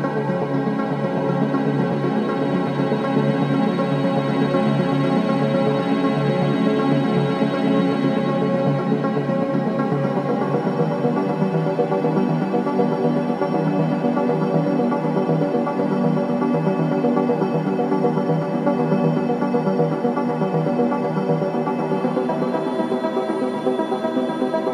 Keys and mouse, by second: 0.1-0.7 typing, 0.4 click, 1.8 typing, 2.0 click, 4.6-12.2 drag, 12.6-13.0 drag, 14.2-15.2 drag, 15.9 click, 17.1-19.2 drag, 19.6 typing, 20.0-21.0 drag, 22.1-23.1 drag, 24.0-24.7 typing.